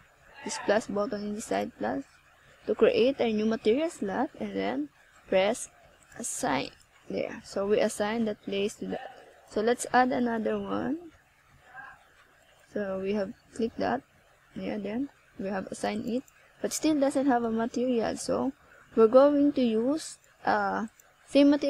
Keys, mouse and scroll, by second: 0.7 click, 1.0 click, 1.1 click, 1.3 click, 1.5 click, 1.7 click, 2.4 scroll down 1, 3.4 KP_0, 9.5 middle click, 11.0-11.5 scroll up 1, 11.5 middle click, 14.4 right click, 15.0 right click, 15.6 click, 19.1 ctrl+alt+KP_0, 20.3 scroll down 1, 21.0 KP_1.